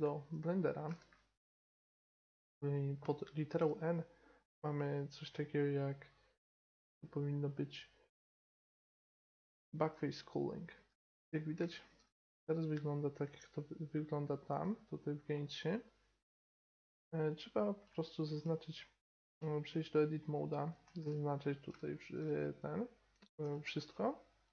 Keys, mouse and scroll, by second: 0.8-2.8 middle drag, 3.5 n, 4.7 middle click, 10.9 n, 11.5-12.4 middle drag, 15.6-16.0 middle drag, 17.2-19.0 right drag, 17.8 Tab, 19.1 Tab, 19.7-20.5 right drag, 20.5-23.1 middle drag, 20.8 Tab, 23.4 a, 23.8 a.